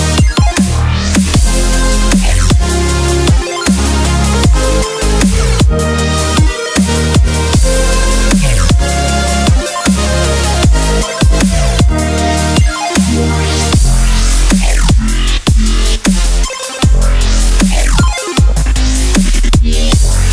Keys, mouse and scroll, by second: 0.0 click, 5.2-8.2 middle drag, 12.0 Tab, 13.2 u, 18.7 click.